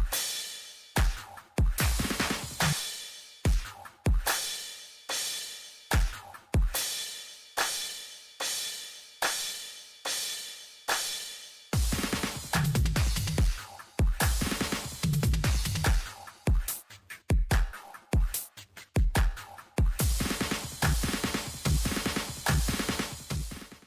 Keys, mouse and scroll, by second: 0.0 scroll up 1.